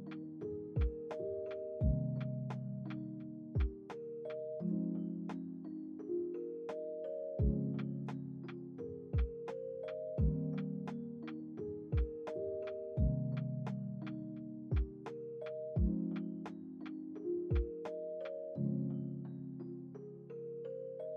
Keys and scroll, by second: 11.4 space, 15.1 space, 16.5 x.